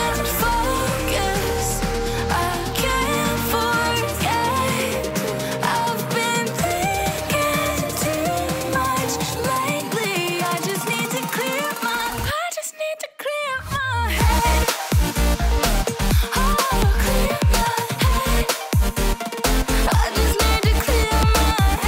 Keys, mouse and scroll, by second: 3.2 ctrl+u, 4.2-5.3 ctrl+drag, 5.5 ctrl+click, 5.9 ctrl+click, 7.0 ctrl+click, 7.5 ctrl+click, 8.6 ctrl+click, 9.3 ctrl+click, 9.8 ctrl+click, 10.1 ctrl+click, 10.6 ctrl+click, 11.8 ctrl+click, 12.2 ctrl+Return.